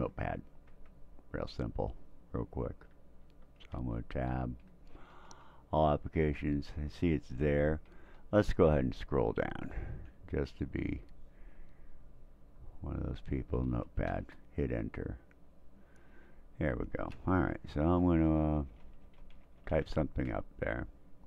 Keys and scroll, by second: 3.2 Tab, 3.7 Tab, 4.9 Return, 6.7-7.4 Down, 8.1-9.8 Down, 11.0 Up, 11.9 Up, 12.5 Up, 14.1 Return, 17.8-20.3 typing.